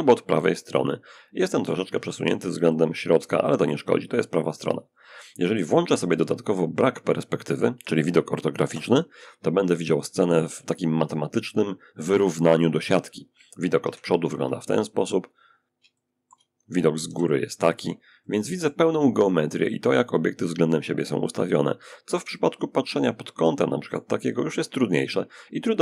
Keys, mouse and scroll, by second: 1.9-5.5 shift+drag, 7.9 5, 9.9 middle click, 13.1 1, 14.7 middle click, 15.2 shift+click, 16.3 shift+7, 17.5-18.5 shift+drag, 21.6 middle click, 21.9-23.8 drag.